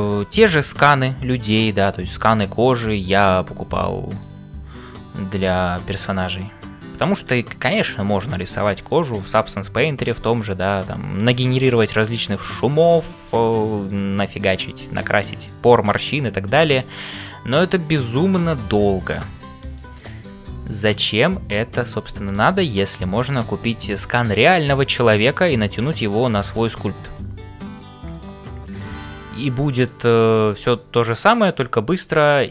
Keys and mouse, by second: 0.0-32.5 typing, 4.6 middle click, 5.9 click, 6.5 middle click, 9.4 middle click, 13.0 middle click, 13.7 click, 14.3 middle click, 18.2 middle click, 19.0 click, 19.4 middle click, 21.2-23.2 middle drag, 23.5 shift+middle click, 25.7 click, 26.2 middle click, 29.3 middle click.